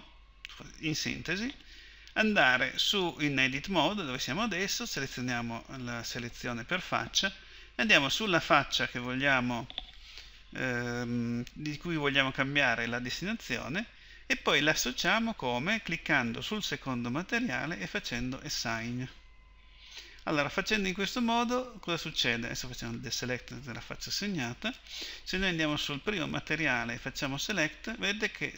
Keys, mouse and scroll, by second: 0.0 Escape, 7.9-13.8 drag.